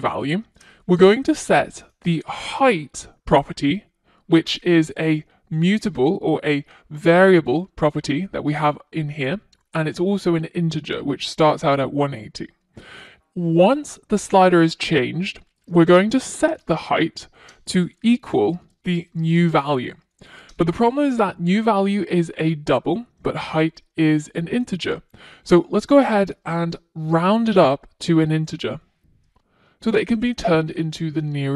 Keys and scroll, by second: 2.2 Tab, 18.5 Return, 30.2 Return, 30.8 F1.